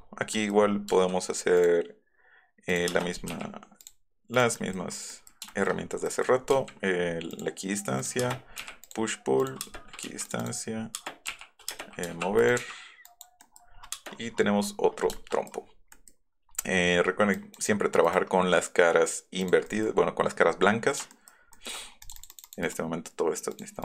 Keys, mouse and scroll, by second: 0.0 middle click, 0.7-1.7 scroll up 8, 0.9 f, 2.7 right click, 2.9 space, 3.1 middle click, 3.9 click, 4.4 click, 4.7 middle click, 5.9 scroll up 2, 6.1 click, 6.6 g, 8.2 space, 8.9 click, 9.4 click, 10.1-12.1 typing, 10.3 click, 10.4 click, 12.4 click, 12.5 Up, 13.6 middle click, 14.0 space, 15.2 shift+click, 15.5 middle click, 16.1 middle click, 16.6 middle click, 16.9 middle click, 17.4 middle click, 18.1 right click, 19.5 right click, 19.7 click, 20.0-20.4 scroll down 4, 21.2 shift+middle click, 22.1 click, 23.5 click.